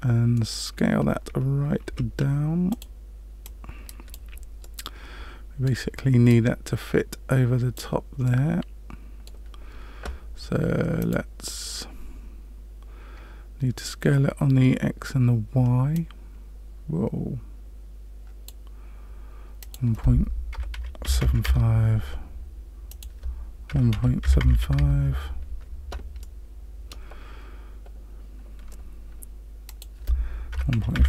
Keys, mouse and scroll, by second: 0.3 middle click, 1.8 s, 3.4 click, 4.6 middle click, 6.2 click, 8.2 middle click, 11.0 click, 15.9 click, 19.6 click, 22.8 click, 26.2 middle click, 29.6 click.